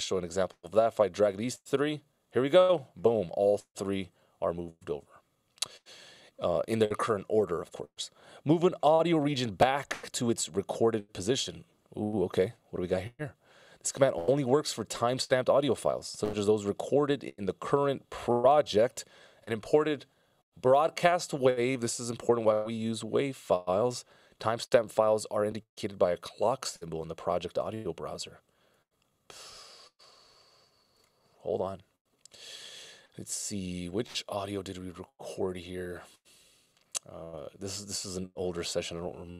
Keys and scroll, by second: 3.3 i, 4.3 super+z.